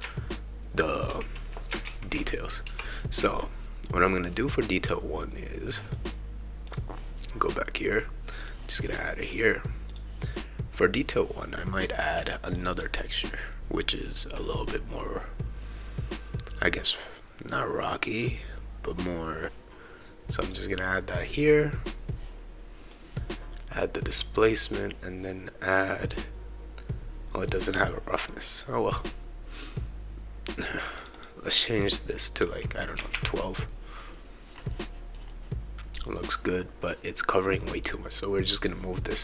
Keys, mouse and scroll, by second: 1.6-3.0 shift+right drag, 1.9 shift+q, 6.7 click, 8.3 click, 9.9 click, 12.5 click, 19.4-21.6 drag, 22.9-24.6 drag, 24.0-24.5 scroll down 1, 30.9 click, 31.1 click, 34.7-36.7 right drag, 38.6 click.